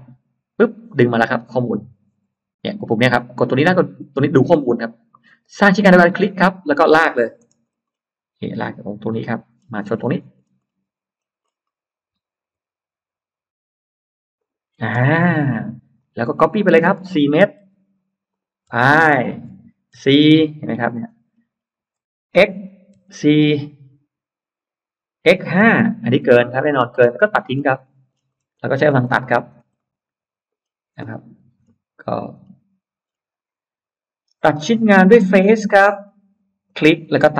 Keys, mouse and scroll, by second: 6.0 click, 6.9 middle click, 7.0-7.9 scroll up 6, 9.1 click, 9.4-10.5 scroll down 3, 11.0-11.8 scroll up 2, 12.4-12.7 scroll up 1, 14.2 click, 14.8-15.6 scroll down 2, 15.0 space, 15.8 click, 16.2-16.9 scroll down 2, 16.4 middle click, 17.2-17.5 scroll up 1, 17.5 m, 18.2 click, 19.8 typing, 20.3 Return, 20.9 middle click, 21.4 middle click, 22.2 x, 22.8 4, 23.1 Return, 25.0 x, 25.5 5, 25.7 Return, 26.4 space, 26.8 middle click, 27.0 scroll up 2, 27.4 scroll down 2, 27.8 middle click, 28.0 scroll down 2, 28.4-29.9 scroll up 6, 29.6 middle click, 30.4-31.2 scroll down 4, 31.4-32.1 scroll up 4, 32.0 middle click, 32.3 scroll down 2, 32.9-33.2 scroll up 2, 35.0 click, 35.8-36.2 scroll up 1, 36.5 click.